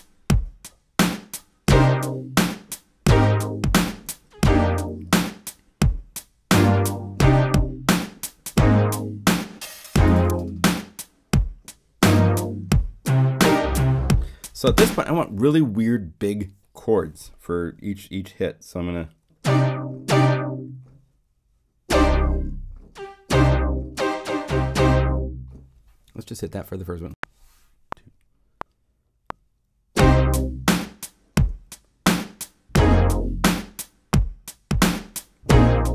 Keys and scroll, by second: 14.7 0, 26.4 0, 27.1 *.